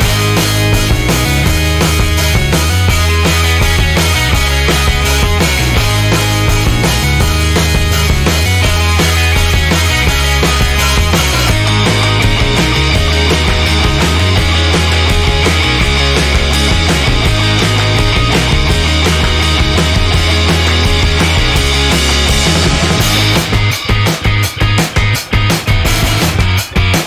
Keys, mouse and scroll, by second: 1.5-4.4 drag, 6.1-7.1 scroll down 4, 8.4-8.9 drag, 9.3 1, 10.4 scroll down 2, 11.2-11.6 scroll down 2, 12.9 2, 15.1 3, 16.9 4, 19.1 5, 20.5 0, 21.4-21.9 scroll down 2, 22.2 scroll up 2, 22.9 click, 23.8 scroll down 2, 25.5 click.